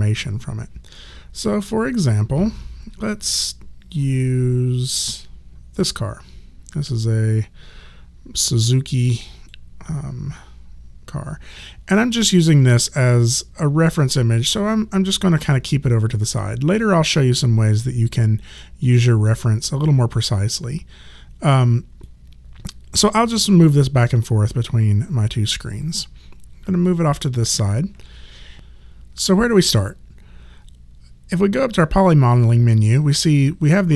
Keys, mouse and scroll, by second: 9.2 click, 13.8 click, 17.4 click, 22.0 click.